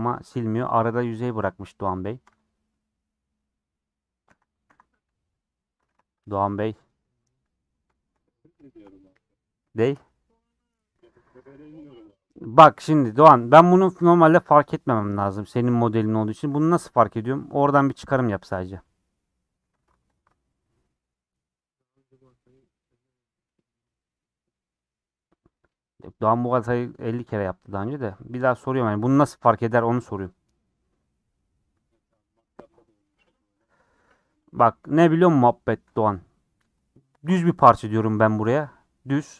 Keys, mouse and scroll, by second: 3.6 Left, 4.3 w, 4.7 w, 5.4 Left, 7.4 middle click, 7.8-8.4 scroll up 3, 7.9 shift+middle click, 8.6 shift+middle click, 8.9 scroll up 1, 9.0 middle click, 9.5 scroll up 1, 9.7-11.3 shift+middle drag, 11.3 alt+z, 11.6-14.0 middle drag, 14.0 click, 14.4 scroll down 3, 14.6-19.1 middle drag, 19.1 click, 19.4 middle click, 19.7 scroll up 2, 20.7-23.6 middle drag, 24.9-25.3 scroll up 3, 25.3-27.0 middle drag, 27.0 scroll down 3, 27.2-28.4 middle drag, 28.4-28.7 scroll up 4, 28.7-34.0 middle drag, 34.0-34.5 scroll down 8, 34.5-36.2 middle drag, 36.2 scroll up 1.